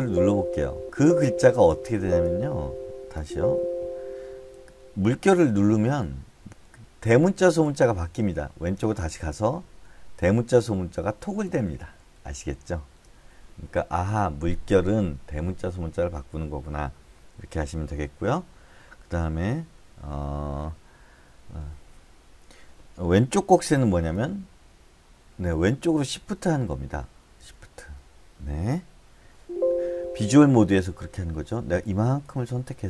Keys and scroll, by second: 2.3 shift+Tab, 3.6 Escape, 6.1 ~, 6.8 ~, 7.5 ~, 8.3 Left, 8.5 Left, 9.2 Left, 9.4 Left, 24.6 shift+Left, 25.9 shift+Left, 27.8 shift+Left, 29.8 Escape.